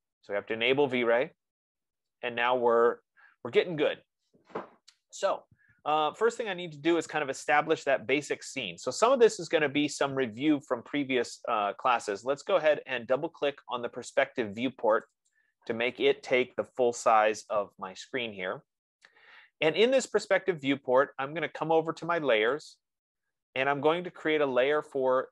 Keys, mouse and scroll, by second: 0.6 click, 2.5-5.3 drag, 15.5 click, 19.5-20.1 scroll, 20.7 F15, 23.0 click, 23.5-24.4 scroll up 3.